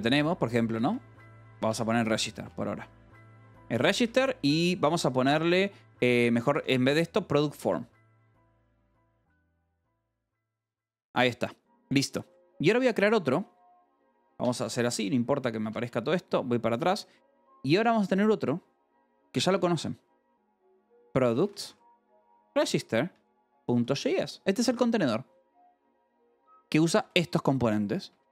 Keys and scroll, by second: 0.0-11.2 typing, 2.9 Escape, 12.2 o, 14.2 ctrl+g, 14.8 Escape, 15.5 a, 15.8 BackSpace, 20.1-25.1 typing, 26.2 Escape, 26.4-28.3 typing.